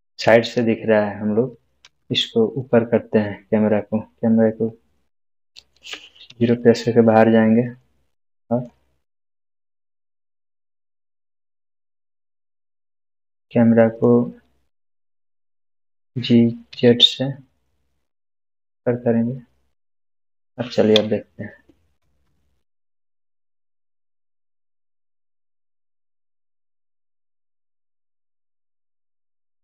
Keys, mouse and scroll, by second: 1.8 click, 3.7 space, 7.8-8.8 middle click, 8.7 scroll down 1, 9.8 click, 10.5-11.5 middle drag, 16.0 g, 18.7 z, 19.8 z, 21.0 click, 22.1 space.